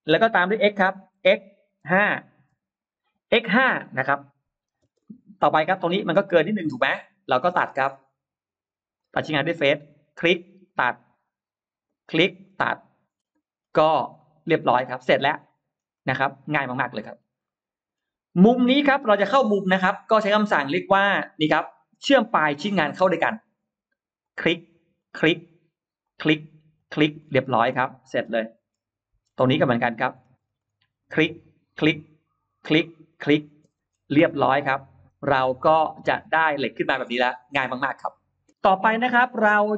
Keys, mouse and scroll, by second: 0.0-0.5 scroll down 4, 1.1 x, 1.7 5, 2.4 Return, 4.9 middle click, 4.9 space, 5.1-5.4 scroll down 1, 5.4-5.7 scroll up 1, 5.9 middle click, 7.1-8.1 middle drag, 8.8 click, 9.9 click, 10.5 click, 11.7 click, 12.9-14.0 scroll down 4, 14.0 middle click, 14.2-14.8 scroll down 2, 14.8 middle click, 14.9 scroll down 1, 15.3 middle click, 15.8-17.0 scroll up 3, 17.0-18.0 scroll down 3, 17.3 middle click, 18.2 scroll up 2, 18.5 middle click, 19.1 middle click, 19.3 middle click, 23.1 click, 24.1 click, 24.8 click, 25.9 click, 26.6 click, 27.1-27.9 scroll down 4, 27.7 middle click, 28.3 middle click, 28.8-30.3 scroll up 6, 30.4 middle click, 30.9 click, 31.5 click, 32.3 click, 33.0 click, 33.5-34.3 scroll down 4, 33.7 space, 34.6-36.3 middle drag, 36.3-36.7 scroll down 2, 36.9 scroll down 2, 37.5 scroll down 2, 37.8-38.1 scroll up 1, 38.5 middle click, 38.8-39.1 scroll up 1, 39.1 scroll down 1.